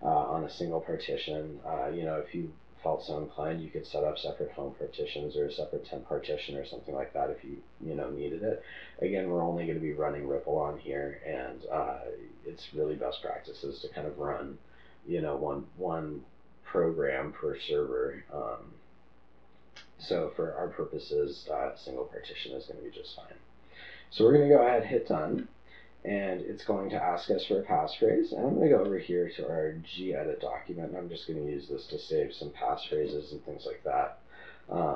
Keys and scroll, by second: 33.5 Return.